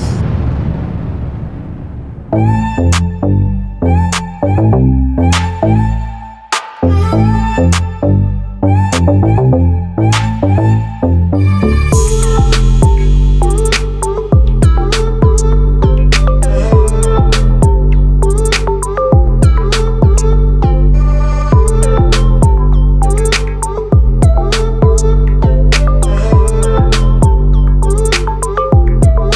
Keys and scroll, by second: 0.7 ctrl+=, 22.3 ctrl+t, 26.6 ctrl+z.